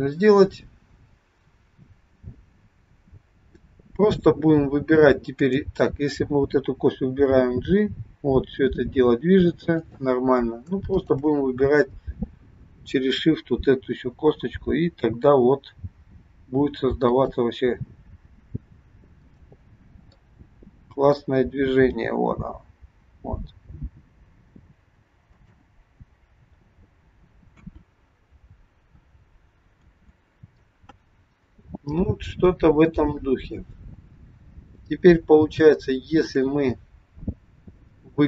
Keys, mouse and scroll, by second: 5.4 click, 7.3 g, 10.9 shift+click, 13.7 g, 19.6 click, 20.3 middle click, 22.2 g, 27.4 KP_1, 28.4-28.8 scroll down 1, 30.2 ctrl+z, 35.0-35.7 scroll up 1, 35.8 shift+middle click.